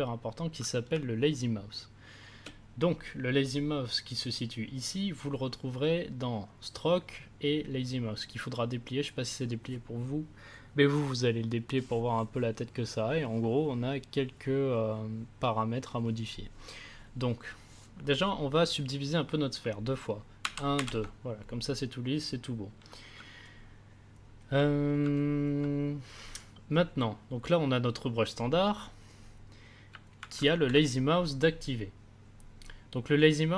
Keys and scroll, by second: 0.9 space, 20.4 ctrl+d, 30.5 ctrl+z.